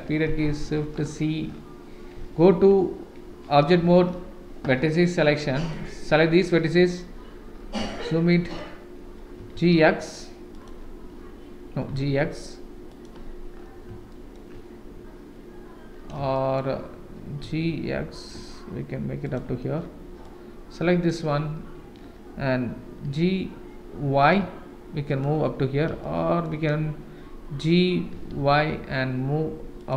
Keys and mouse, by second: 0.5 shift+z, 2.5 1, 3.3 Tab, 3.8 1, 5.1 click, 8.0 shift+middle click, 9.4 g, 11.8 g, 14.1 shift+middle click, 16.3 shift+middle click, 17.4 g, 20.2 click, 23.0 g, 26.0 shift+middle click, 28.1 g.